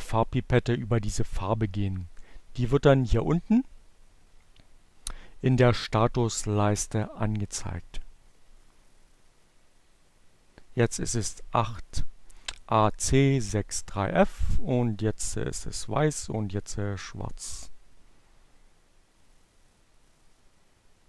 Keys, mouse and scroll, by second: 2.8-3.8 drag.